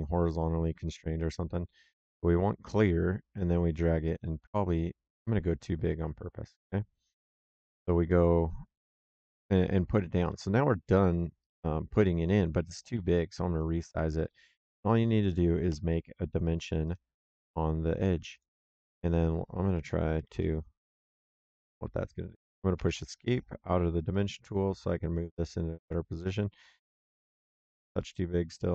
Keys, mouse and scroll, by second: 2.7 click, 8.0 middle click, 10.2 middle click, 11.3 click, 15.6 d, 16.7 click, 18.2 click, 20.0 KP_2, 20.2 KP_Enter, 22.7 Escape, 24.0 click, 27.9 middle click.